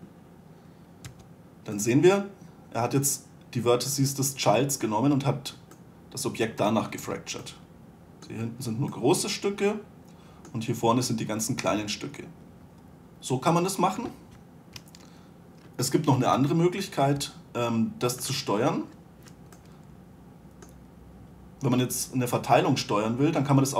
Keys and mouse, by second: 1.4 2, 5.4-7.4 middle drag, 7.4 z, 16.5 Delete, 17.5 1, 19.7-20.1 right drag.